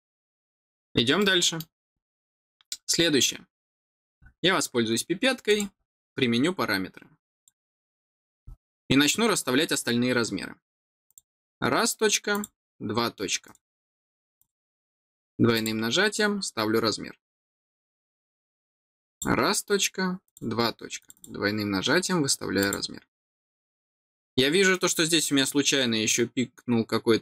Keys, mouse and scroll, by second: 0.5-0.9 scroll down 2, 1.1 middle click, 5.4 click, 7.3 click, 11.0 click, 12.2 click, 13.4 right click, 14.2 click, 14.3 click, 15.5 click, 16.4 middle click, 16.4 scroll down 1, 19.0 click, 20.2 click, 20.9 click, 21.1 click, 22.5 click.